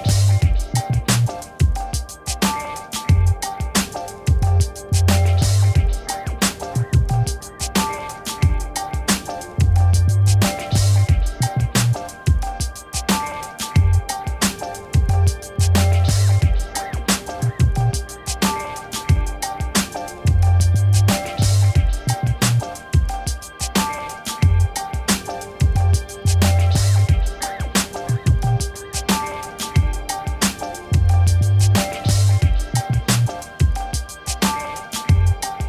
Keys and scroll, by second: 1.1 v, 3.9 ctrl+w, 4.6 ctrl+w, 10.1 ctrl+t, 22.2 Return, 26.6 p, 34.3 ctrl+Return, 34.8 BackSpace, 35.1 ctrl+d.